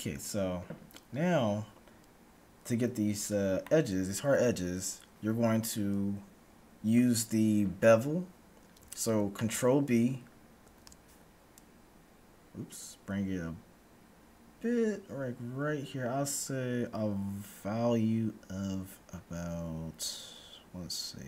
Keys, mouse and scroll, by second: 9.7-11.7 middle drag, 10.7 ctrl+b.